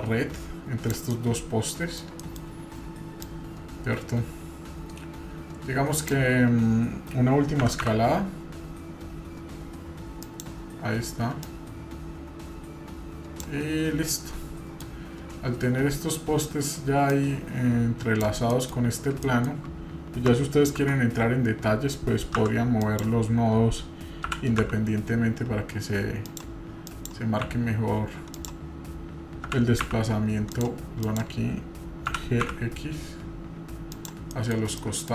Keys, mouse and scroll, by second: 1.1-2.1 middle drag, 2.2 middle click, 3.2 click, 8.1 s, 11.4-13.4 drag, 13.7-14.1 scroll up 1, 14.1-14.9 middle drag, 14.9 scroll down 1, 17.1 click, 18.5 middle click, 18.9 scroll up 1, 19.2-19.6 shift+middle drag, 20.8 Tab, 22.8 click, 24.3 g, 26.9 click, 27.4 x, 28.3 click, 29.5 g, 29.8 x, 30.5 click, 31.0 click, 32.1 g, 34.3 middle click, 34.5-35.0 scroll down 2, 34.8 middle click.